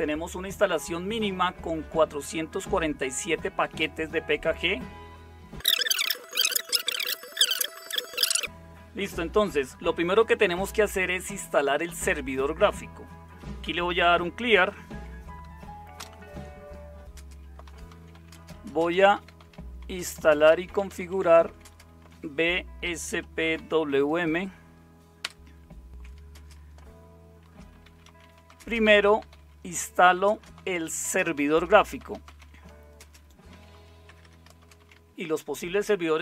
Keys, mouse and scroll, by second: 5.9-8.0 typing, 13.5-26.3 typing, 27.4-35.4 typing.